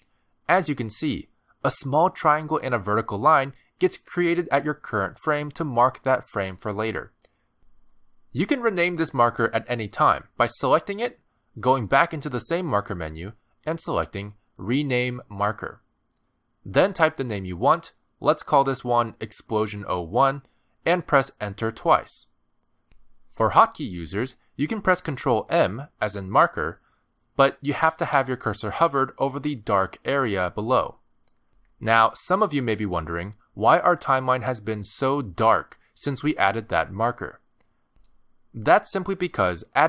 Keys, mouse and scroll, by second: 3.0 click, 12.0 click, 13.3 click, 20.8 BackSpace, 22.6 Return, 28.7 ctrl+m.